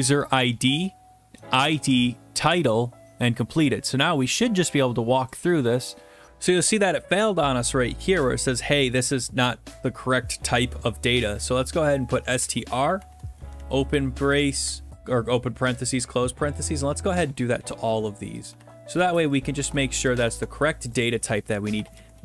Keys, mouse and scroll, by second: 5.3 click, 12.1-13.5 typing, 13.6-14.3 Right, 14.5 Right, 17.2 click, 17.6 ctrl+c, 18.4 click, 18.6 ctrl+v, 19.4 click, 19.7 ctrl+v, 20.2 click, 20.4 ctrl+v, 21.0 click, 21.8 click.